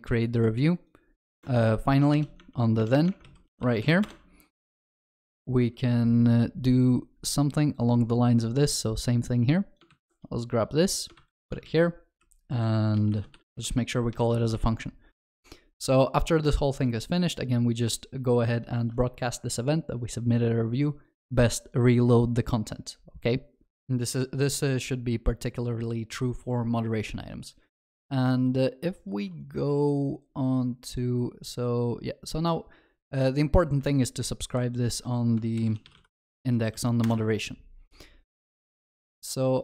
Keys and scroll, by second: 4.6 Tab, 4.6 ctrl+BackSpace, 9.9 ctrl+c, 14.2 ctrl+alt+shift+l, 17.2 ctrl+s, 35.6 ctrl+shift+n.